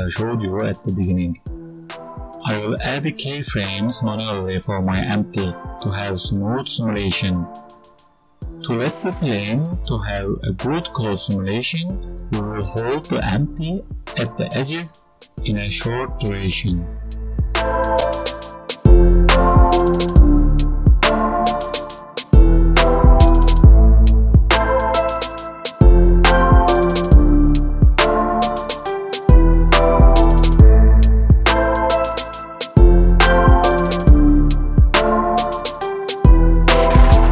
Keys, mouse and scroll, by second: 31.0 right click, 31.5 click, 31.7 click, 32.4 right click, 33.6 click, 35.2 click, 36.6 g.